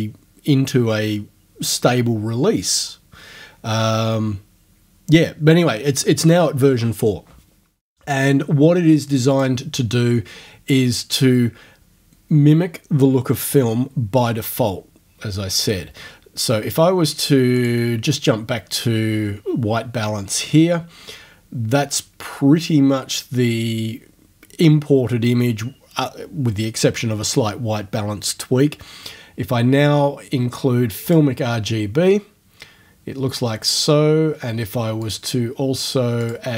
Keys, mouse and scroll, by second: 9.3 click, 17.6 click, 31.1 click, 35.0 click, 36.2 click.